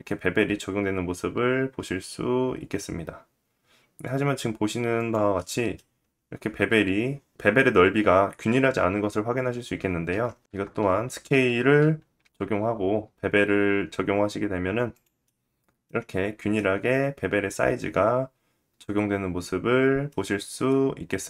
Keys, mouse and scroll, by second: 4.5-5.5 middle drag, 5.5-7.9 scroll up 2, 8.4 middle click, 9.3-10.0 scroll down 1, 10.3 ctrl+z, 10.3 scroll down 1, 10.4 Tab, 11.1 ctrl+a, 13.2 click, 13.5 Tab, 15.2 ctrl+b, 18.6 middle click, 19.3-19.9 scroll up 2, 19.9 middle click.